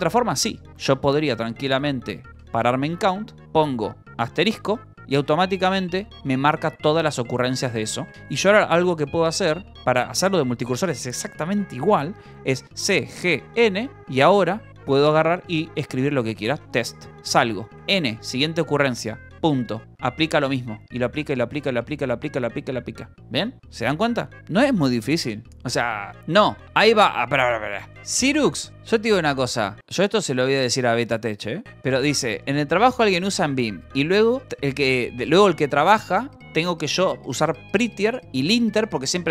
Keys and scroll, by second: 0.6 k, 0.9 Escape, 1.4 s, 1.6 c, 2.2 j, 4.3 shift+n, 5.2 n, 6.3 n, 7.7 n, 10.0 shift+n, 12.3-13.8 typing, 16.3-17.7 typing, 19.2-24.8 typing, 23.6 Escape, 26.1 u.